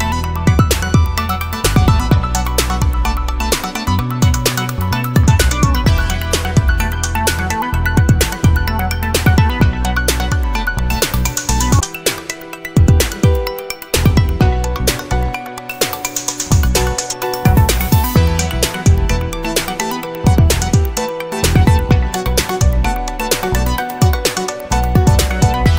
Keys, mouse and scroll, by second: 0.8-3.1 typing, 4.2 click, 5.3-8.3 drag, 8.6-9.2 scroll up 1, 10.1-10.5 scroll down 1, 11.1 click, 11.8-12.1 scroll down 1, 12.7 click, 13.9 click, 14.7 click, 16.1-16.6 scroll up 1, 16.6 click, 17.1 scroll down 1, 17.4 middle click, 19.3 click, 19.6-20.3 scroll down 1, 21.1 click, 22.6 click, 23.4 click, 24.1 click, 25.4 0.